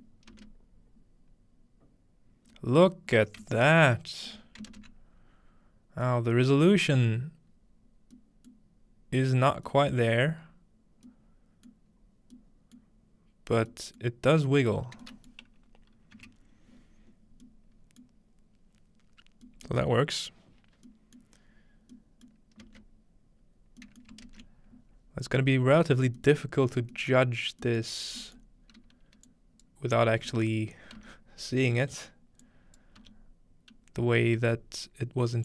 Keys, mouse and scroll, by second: 0.2-2.2 middle drag, 0.2-1.3 scroll down 2, 1.3-2.2 scroll down 1, 4.4-22.2 shift+middle drag, 16.2-17.3 scroll down 1, 17.3-17.9 scroll down 1, 17.9-18.2 scroll down 1, 22.3-23.6 middle drag, 22.7 space, 24.1 middle click, 24.3 ctrl+space, 25.4 middle click, 25.9-26.4 scroll down 2, 26.4-30.2 middle drag, 30.2-31.4 scroll up 2, 30.5-31.7 middle drag, 31.0 x, 31.9-34.2 middle drag.